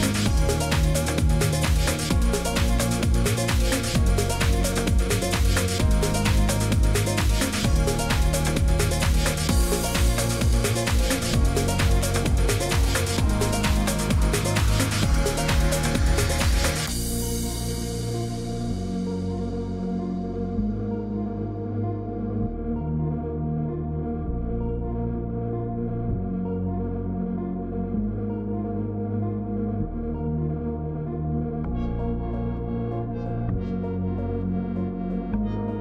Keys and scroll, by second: 1.4-3.8 typing, 6.1 ctrl+d, 6.4-6.9 Up, 8.3-11.1 typing, 13.1 0, 15.3-16.1 typing, 16.6 shift+Up, 16.6 shift+Up, 17.5 shift+Down, 18.7 ctrl+d, 19.0 shift+Down, 19.3 shift+Down, 19.6 shift+Up, 21.0-25.8 typing, 25.1 Left, 28.9-30.2 typing, 31.5 Up, 32.4 Left, 32.5 Left, 32.6 Left, 32.9 Down, 33.0 Down, 33.1 Down, 33.1 Down.